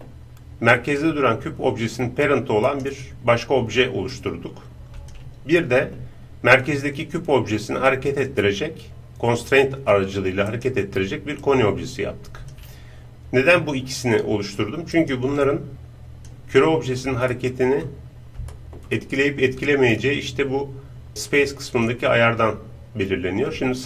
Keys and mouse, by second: 2.7-5.0 right drag, 4.2-6.6 drag, 5.6-7.6 middle drag, 5.6-6.6 right drag, 10.5-12.3 right drag, 11.4-13.1 drag, 15.0 right click, 15.7-17.5 drag, 17.3-22.3 middle drag, 21.7-23.8 drag.